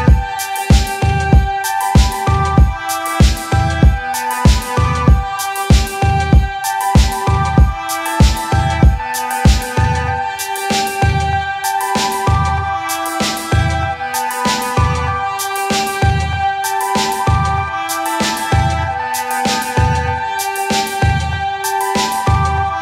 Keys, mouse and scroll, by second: 1.0 scroll, 1.6-2.6 scroll, 2.9 click, 3.9 click, 5.0 click, 7.1 scroll down 2, 7.5 scroll, 8.2 click, 10.7 middle click, 10.8 middle click, 11.5 middle click, 12.3 click, 12.3-13.2 scroll, 13.2 click, 13.9 click, 14.3 click, 15.1 click, 19.0 click, 21.7 click, 22.6 click.